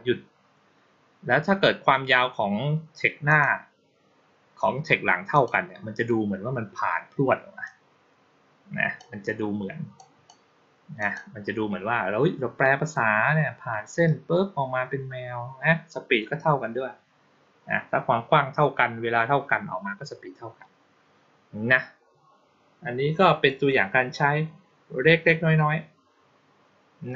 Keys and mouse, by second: 3.1 click, 5.2 click, 7.5-8.8 drag, 9.8-10.1 drag, 10.9 click.